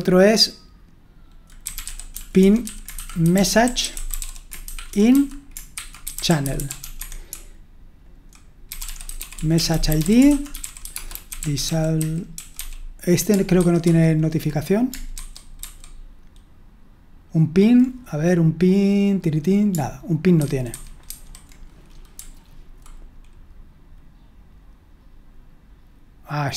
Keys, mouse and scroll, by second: 0.0-13.0 typing, 13.6 alt+1, 13.8 alt+2, 15.1 super+1, 15.6 super+2, 20.4 super+1, 20.7 super+2, 21.1 super+1, 22.2 h.